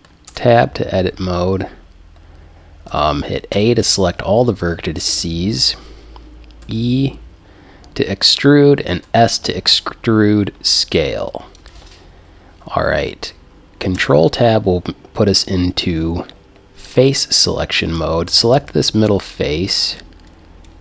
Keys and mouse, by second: 0.3 Tab, 2.9 a, 3.6 a, 6.6 e, 11.7-13.5 drag, 14.0 ctrl+Tab, 17.8-20.8 right drag.